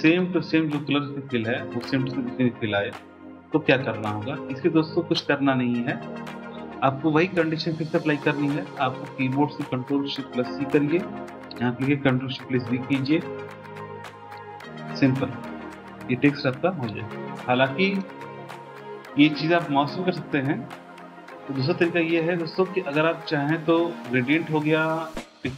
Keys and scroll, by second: 10.6 ctrl+shift+c, 12.6 ctrl+shift+v.